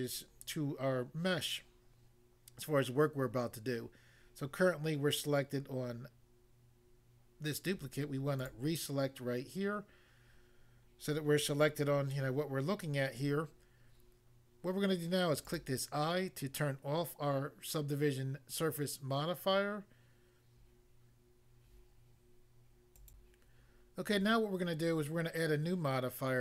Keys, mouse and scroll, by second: 8.4 click, 8.5 click, 15.4 click, 15.5 click, 23.0 click, 23.2 click.